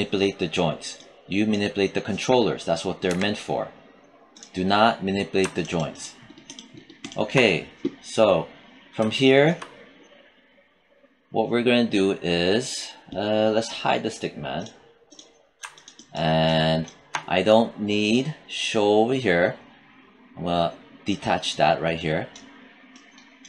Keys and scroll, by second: 3.0 e.